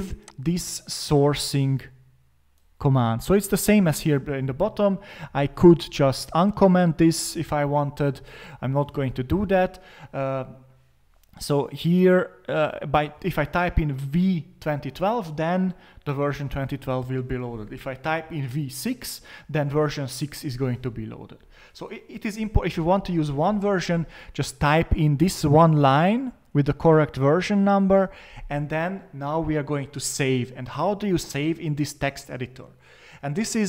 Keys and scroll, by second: 5.8 Up, 8.1 BackSpace.